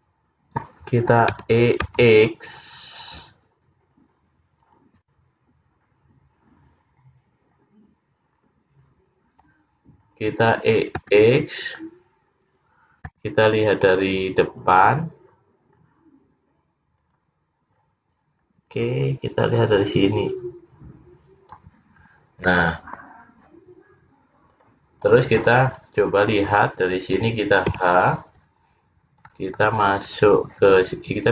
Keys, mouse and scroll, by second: 1.5 e, 10.0-11.0 scroll down 1, 11.0 scroll down 1, 15.2 `, 15.8-16.2 scroll down 4, 17.0 click, 20.3 click, 22.1-22.8 scroll down 3, 22.5 middle click, 24.6 click, 25.8 click, 26.7 click, 27.8 h, 28.9-29.4 scroll down 3, 29.4 middle click, 30.0 click.